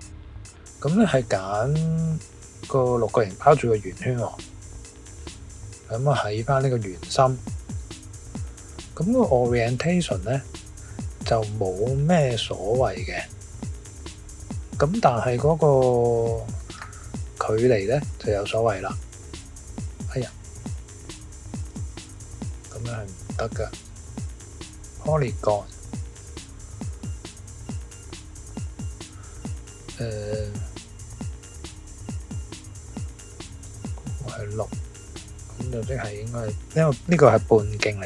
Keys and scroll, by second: 20.7 super+z, 21.7 super+z, 30.1 Tab, 30.4 Tab, 37.5 3.